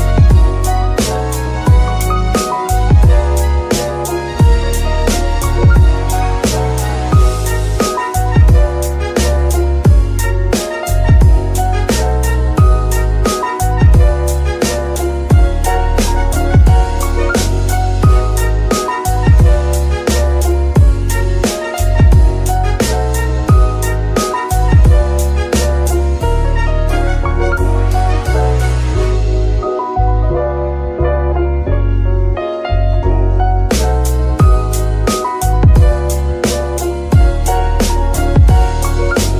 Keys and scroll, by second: 1.5 KP_1, 7.3 KP_3, 13.0 shift+d, 13.4 shift+y, 14.4 Tab, 14.8 shift+s, 15.8 Tab, 16.6 shift+s, 18.1 KP_3, 19.1 F2, 20.0 BackSpace, 20.2 BackSpace, 20.4 BackSpace, 22.7 Left, 23.2 -, 23.9 b, 24.1 k, 24.6 Return, 26.6 F2, 28.5 Right, 28.9 shift+-, 29.3 shift+f, 29.4 r, 30.0 Return.